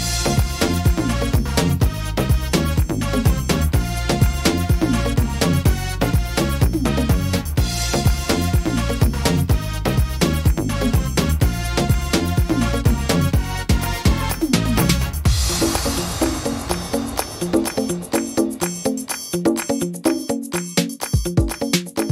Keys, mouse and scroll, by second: 0.0 ctrl+r, 1.7 ctrl+r, 3.2 ctrl+r, 5.0 middle click, 5.6 scroll up 2, 6.0 shift+middle click, 8.9 click, 9.3 middle click, 10.0 shift+middle click, 11.5 shift+right click, 11.9 shift+right click, 12.8 shift+right click, 14.6 shift+right click, 16.0 shift+right click, 16.7 shift+right click, 18.2 shift+right click, 18.7 shift+right click, 20.1 right click, 20.6 right click, 21.3 shift+right click.